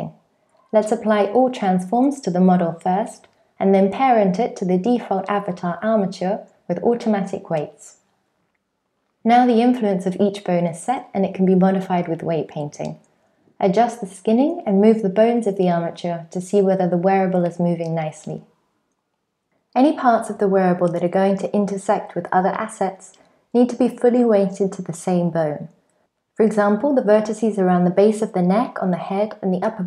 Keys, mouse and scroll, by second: 2.1 shift+click, 4.3 ctrl+p, 9.1 click, 9.5 alt+z, 9.7 click, 10.3 click, 10.5 click, 10.8 shift+click, 11.3 click, 12.2 ctrl+click, 12.7 ctrl+click, 12.9 r, 13.8 ctrl+click, 14.3 ctrl+click, 14.4 r, 15.4 ctrl+click, 15.5 r, 16.6 ctrl+click, 16.8 r, 17.6 ctrl+click, 17.8 r, 18.4 ctrl+click, 18.5 r, 19.6 ctrl+click, 19.8 r, 20.4 Tab, 25.5 shift+middle click, 26.0-26.5 scroll up 3, 26.3-26.8 click, 26.5 click, 26.6 click, 27.1 click, 27.3 click, 27.8-28.5 click, 28.2 click, 28.3 click, 28.8-29.1 click, 28.9 click, 29.0 click, 29.5 click, 29.7 click, 29.8 click.